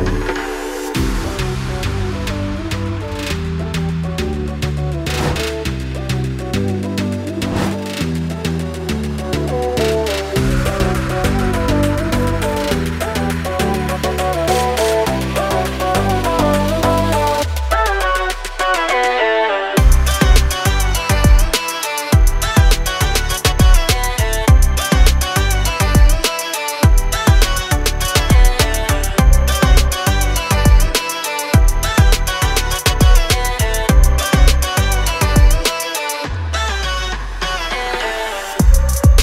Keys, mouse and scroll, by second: 0.4 ctrl+click, 8.1 click, 8.8-9.1 scroll down 1, 9.1 scroll up 1, 10.0 ctrl+click, 10.6 scroll up 1, 11.5 click, 11.6 scroll down 1, 11.8 scroll up 1, 12.6 right click, 12.7 click, 13.2 ctrl+click, 14.0 ctrl+r, 15.5 ctrl+click, 16.3 ctrl+click, 16.6 click, 16.9 scroll up 1, 17.1 ctrl+click, 18.0 scroll down 1, 18.3 scroll up 1, 19.0 click, 19.4 scroll down 1, 20.4 right click, 20.6 click, 21.0 scroll up 1, 21.4 ctrl+click, 22.0 click, 22.6 ctrl+click, 23.7 click, 23.7 scroll down 1, 24.1 click, 25.6 F4, 28.0 F9, 29.4 click, 34.7 click, 36.8 scroll down 1, 38.4 scroll down 1.